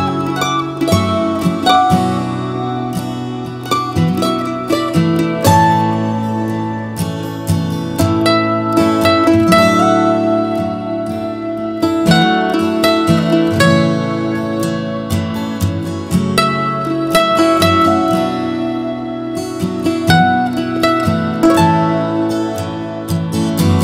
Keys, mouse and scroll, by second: 12.7 scroll, 17.6 b.